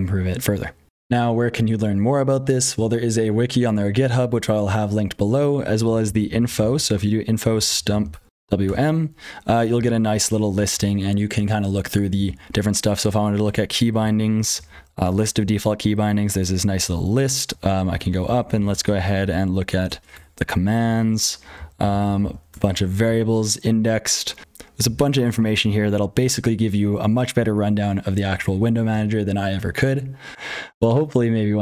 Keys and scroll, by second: 0.0-31.6 typing, 0.8 super+k, 0.8 super+h, 0.8 ctrl+z, 0.8 F12, 8.6 Return, 9.7 ctrl+n, 9.9 ctrl+n, 10.5 ctrl+p, 10.7 ctrl+p, 12.1 ctrl+n, 13.4 Return, 14.0 ctrl+n, 14.2 ctrl+n, 14.5 ctrl+n, 14.5 ctrl+n, 14.7 ctrl+n, 15.0 Return, 15.4 ctrl+n, 15.6 ctrl+n, 18.2 ctrl+n, 18.4 ctrl+n, 18.6 ctrl+n, 18.8-19.2 ctrl+n, 19.2-19.7 ctrl+p, 20.1 Return, 21.0-21.5 ctrl+n, 21.7 ctrl+n, 21.8 ctrl+n, 22.0 ctrl+n, 22.1 ctrl+n, 22.4 Return, 23.0 ctrl+n, 23.2-24.4 ctrl+n, 24.8 ctrl+n, 25.0 ctrl+n, 25.6 ctrl+p, 25.8 ctrl+p, 25.9 ctrl+p, 27.3-28.2 ctrl+p, 28.5 ctrl+n, 28.7 ctrl+n, 28.8 ctrl+n.